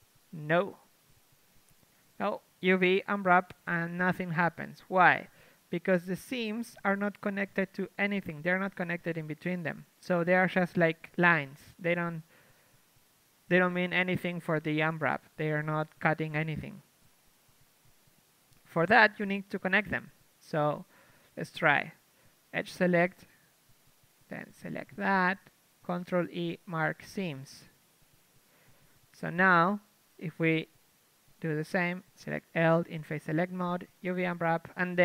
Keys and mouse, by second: 0.6 a, 1.7 a, 1.9 a, 2.9 u, 3.6 KP_3, 4.1 Tab, 4.9 Tab, 5.5 a, 6.5 ctrl+Tab, 7.4 ctrl+Tab, 7.7-9.8 typing, 11.8-15.0 typing, 16.1 shift+space, 19.6-21.6 drag, 21.6-22.7 right drag, 22.1 ctrl+Tab, 22.7 a, 25.7-27.1 drag, 25.9 ctrl+e, 27.1 middle click, 27.4 a, 27.7-30.4 middle drag, 30.4 ctrl+Tab, 32.2 l, 32.8 shift+space, 34.3 u.